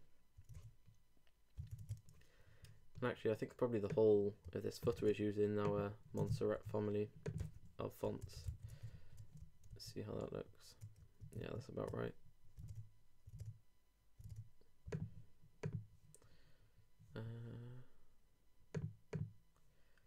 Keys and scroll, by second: 1.6 super+Tab, 4.9 super+x, 6.3 shift+super+Home, 8.0 super+BackSpace, 8.5 super+s, 8.7 super+Tab, 9.7 super+r, 11.2 super+Tab, 12.6 super+Tab.